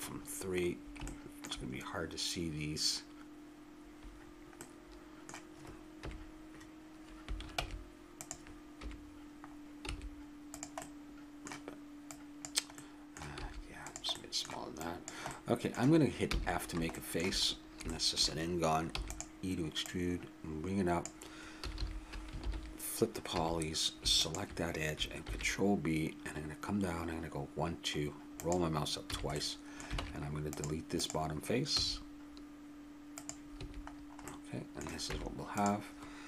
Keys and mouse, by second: 6.0 KP_Decimal, 7.6 ctrl+Tab, 8.8 KP_Decimal, 9.9 s, 12.1-13.1 drag, 13.4 click, 13.4 s, 13.7 click, 14.4 middle click, 14.8-16.6 drag, 16.3 f, 16.7-18.0 middle drag, 18.9 e, 19.8-21.5 drag, 21.6 a, 21.8 a, 22.4 ctrl+n, 23.3 a, 25.2 ctrl+b, 29.1 a, 29.4 middle click, 30.0 ctrl+Tab, 31.0-32.8 drag, 31.8 x, 33.6 a, 34.3 middle click, 34.7-36.2 middle drag, 35.1 Tab.